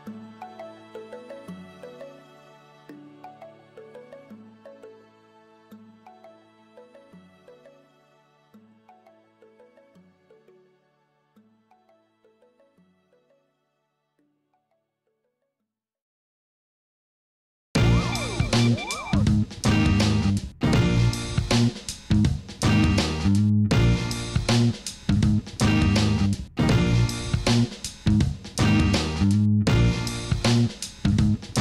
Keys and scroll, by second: 1.8 shift+d, 2.1 y, 4.1 shift+z, 5.5 shift+d, 5.7 y, 6.0 shift+z, 7.0 g, 7.1 y, 10.3 Tab, 12.2 ctrl+r, 13.3 3, 16.7 Tab, 17.2 alt+a, 19.3 Tab, 21.0 i, 21.7 Escape, 22.5 i, 24.3 Tab.